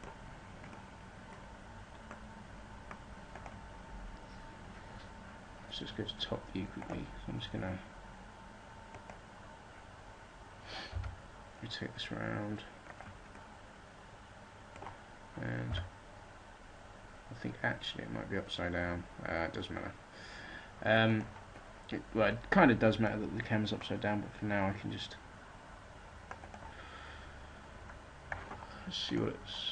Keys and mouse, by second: 9.1 click, 10.9 r, 13.2-14.4 drag, 15.7 r, 24.2 middle click.